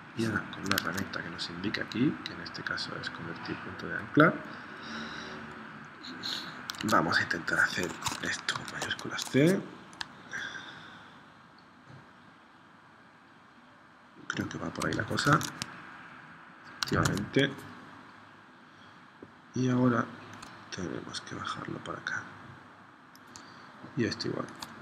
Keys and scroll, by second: 0.9 super+Tab, 6.9 super+Tab, 8.5 shift+c, 15.4 super+Tab, 16.9 super+Tab.